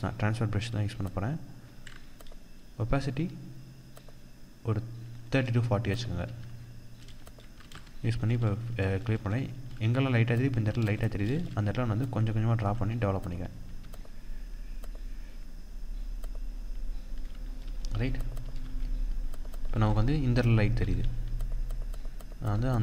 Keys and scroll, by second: 5.8 ctrl+=, 7.2 ctrl+space, 11.3 ctrl+=, 17.0 ctrl+-, 17.8 ctrl+=, 18.0 ctrl+space, 19.2 ctrl+=.